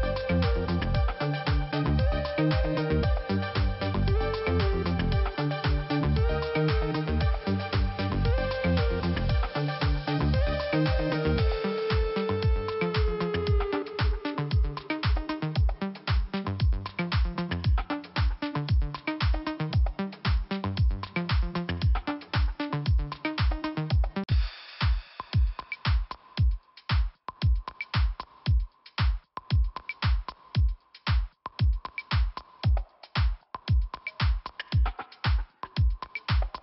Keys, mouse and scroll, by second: 6.3 click, 6.4 click, 7.5 click, 9.2 click, 9.7 click, 11.7 click, 13.3 click, 15.5 click, 18.8 click, 20.9 click, 21.0 click, 21.5 click, 22.7 scroll down 1, 27.9-28.2 scroll up 1, 30.3-30.6 scroll down 1, 30.9 scroll up 1, 32.4 click, 33.0 click, 33.4 Delete, 35.2 click.